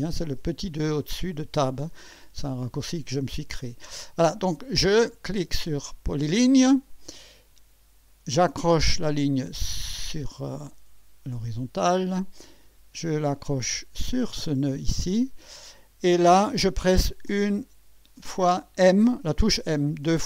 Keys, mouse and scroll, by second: 5.5 click, 10.3 click, 14.2 click, 17.3 m, 20.0 m.